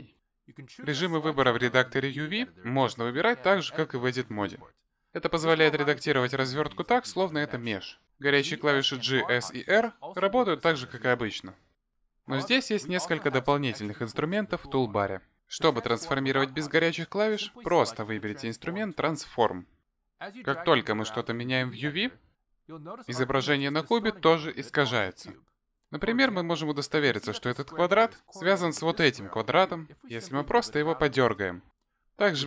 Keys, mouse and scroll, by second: 0.7 click, 1.5 shift+click, 2.0 shift+click, 4.0 click, 4.9 click, 6.1 click, 6.8 click, 7.5 click, 8.2 click, 9.3 g, 10.8 s, 11.7 r, 13.3 scroll up 2, 14.7 scroll up 1, 14.8-15.4 scroll down 1, 16.2 click, 17.2 click, 18.9 click, 20.6 click, 22.0 click, 23.4 click, 25.1 click, 26.1 click, 31.8 click.